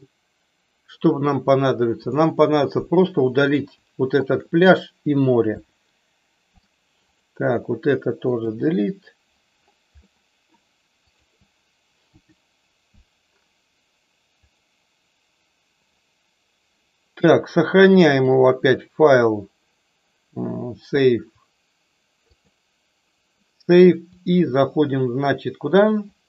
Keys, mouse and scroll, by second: 1.9 click, 4.2 shift+click, 7.0 click, 8.4 Delete, 10.0-10.4 middle drag, 10.9 click, 12.0 Delete, 14.4 click, 18.0-22.5 drag, 24.0-26.2 drag.